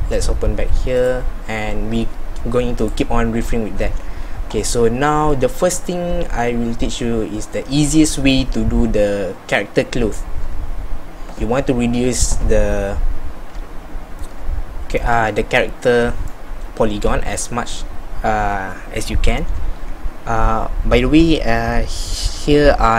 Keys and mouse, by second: 15.2 Tab.